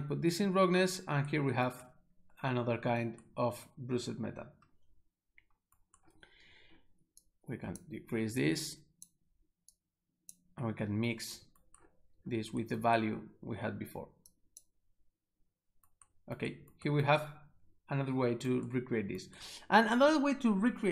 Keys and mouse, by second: 7.3 click, 8.5 click, 9.8 click, 14.2 s, 14.4 click.